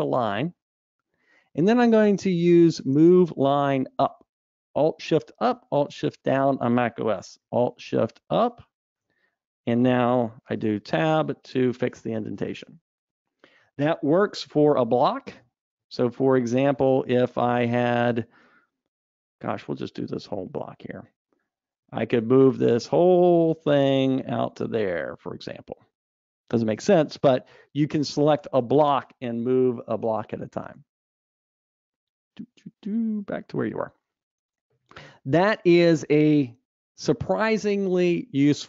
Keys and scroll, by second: 8.7 alt+shift+Up, 10.9 alt+shift+Up, 11.2 shift+Tab, 14.8 super+z, 19.8 alt+Up, 22.5 alt+shift+Up, 23.8 shift+Tab, 31.9 super+z.